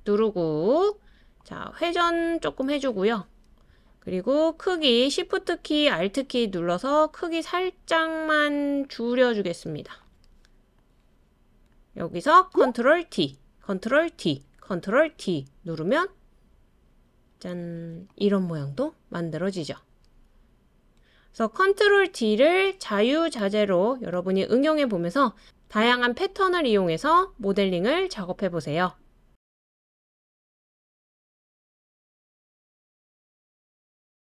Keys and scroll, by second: 13.1 super+d, 14.1 super+d, 15.2 super+d, 16.1 super+d, 16.9 super+d.